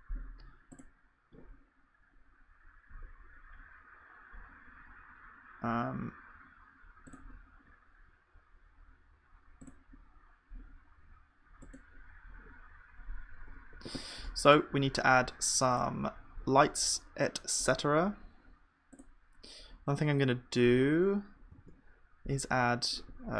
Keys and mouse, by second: 13.4 KP_1, 14.2-15.7 middle drag, 14.3-21.6 drag, 14.3-16.7 right drag, 21.6 shift+a.